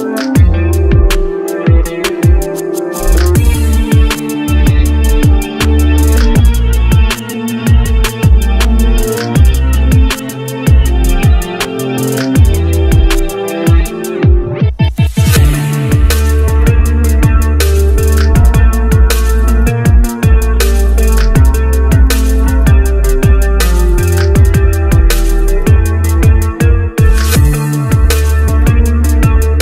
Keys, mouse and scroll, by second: 1.8 double click, 3.4 shift+Page_Up, 10.1 scroll down 1, 21.6 scroll up 1, 22.8 scroll, 23.9 Up, 25.8 double click, 27.6 e.